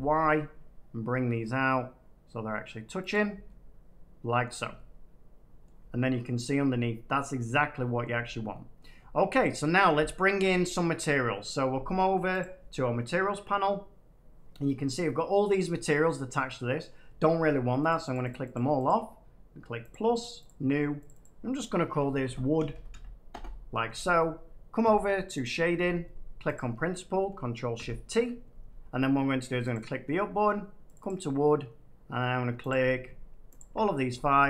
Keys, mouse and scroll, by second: 3.0 click, 4.3-5.3 middle drag, 4.5 Tab, 5.6-7.4 middle drag, 8.7 middle click, 9.6 scroll down 1, 9.7 middle click, 10.5 middle click, 12.3 click, 15.8 middle click, 16.8 scroll, 17.8 click, 18.0 click, 18.2 click, 18.4 click, 18.8 click, 19.8 click, 20.4 click, 21.0 click, 21.1 click, 22.1-23.2 typing, 25.3 click, 26.2 click, 26.5-28.2 drag, 27.7 ctrl+shift+t, 29.6 click, 32.6-34.4 drag.